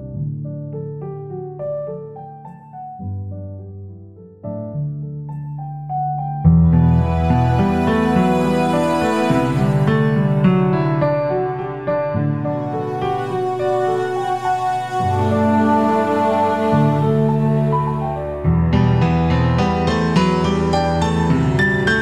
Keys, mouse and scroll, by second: 0.9 click, 16.1 click, 16.1 typing, 18.2-18.7 typing, 18.7 click, 20.5 click, 21.1 typing.